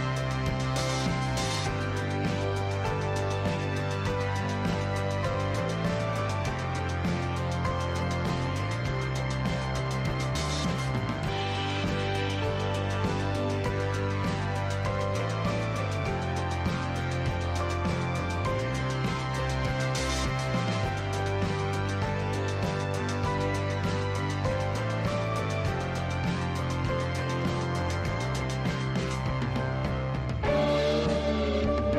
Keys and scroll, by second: 2.0 ctrl+t, 5.6 ctrl+j, 6.2 ctrl+t.